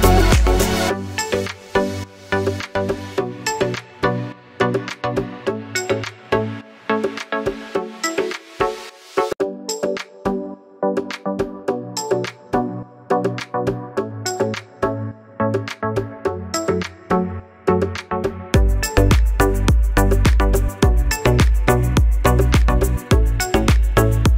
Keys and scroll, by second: 19.9 ctrl+v.